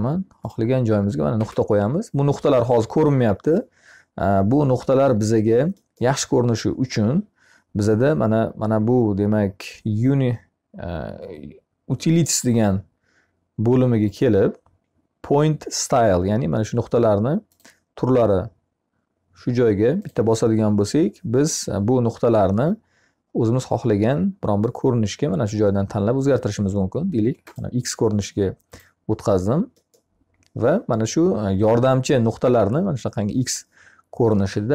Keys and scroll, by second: 1.2 Escape.